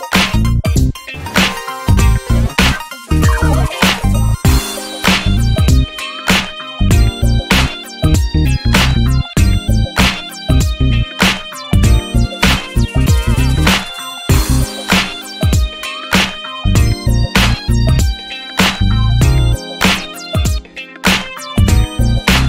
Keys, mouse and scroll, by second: 3.3-5.9 drag.